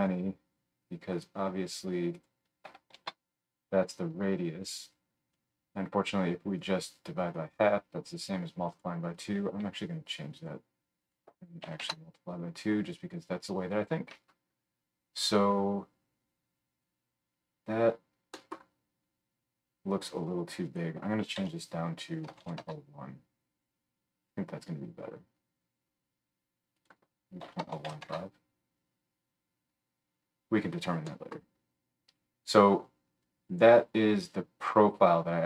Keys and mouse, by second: 1.2-2.1 right drag, 2.1 middle click, 2.2-5.3 right drag, 2.9 shift+d, 5.3-8.7 middle drag, 8.7 right click, 9.1-14.5 middle drag, 33.4-35.4 middle drag.